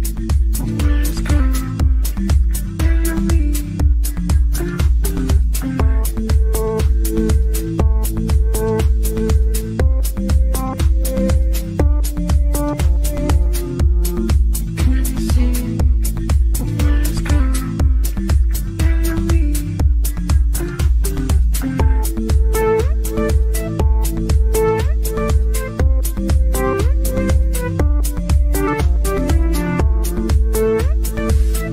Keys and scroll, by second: 31.0 Delete.